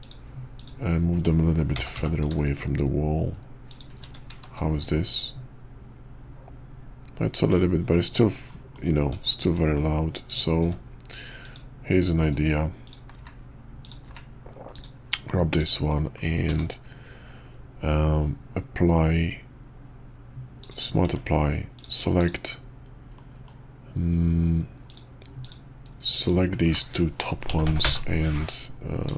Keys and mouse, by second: 1.7 g, 4.3 shift+2, 4.9-7.9 middle drag, 8.5 middle drag, 9.2 shift+click, 9.6 middle click, 10.2 click, 10.6 q, 12.8 click, 13.1 q, 13.8 click, 14.0 q, 16.5 q, 21.0 Tab, 21.7 click, 22.2 click, 23.2 middle click, 24.8 click, 25.4 click, 26.2 shift+click, 27.4 ctrl+l, 27.6 ctrl+p.